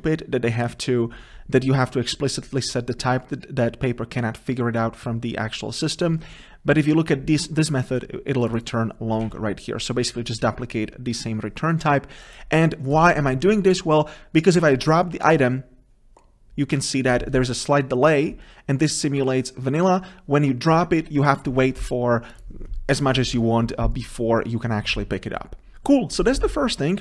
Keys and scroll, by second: 7.3 ctrl+b.